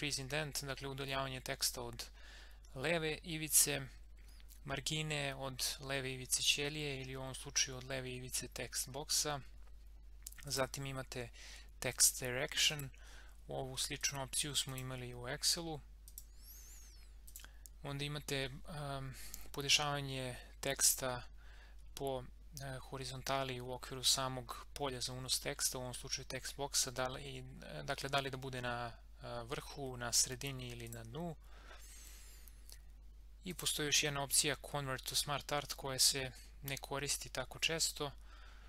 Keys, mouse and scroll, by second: 10.5 click, 30.8 click, 33.5 click.